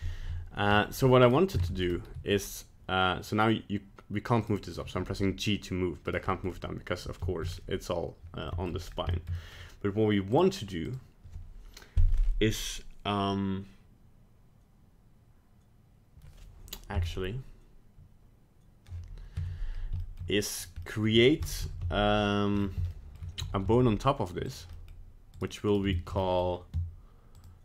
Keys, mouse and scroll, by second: 0.7 scroll down 2, 1.2 right click, 1.6 ctrl+Tab, 1.8 right click, 2.1 g, 4.8 g, 6.2 middle click, 7.2 shift+middle click, 7.4-8.2 scroll down 3, 8.4 middle click, 8.8 scroll up 2, 9.1 shift+middle click, 9.3 middle click, 10.3 click, 10.8 click, 19.4 Tab, 20.0 shift+middle click, 20.2 shift+middle click, 20.6 right click, 20.8 middle click, 21.5 KP_1, 21.8 KP_3, 22.5 scroll up 4, 22.9 shift+middle click, 23.1 shift+middle click, 23.3 e, 24.7 middle click, 25.3 right click, 25.7 right click, 25.9 shift+middle click, 26.2 middle click, 26.3 middle click, 26.4 shift+middle click, 27.3 click.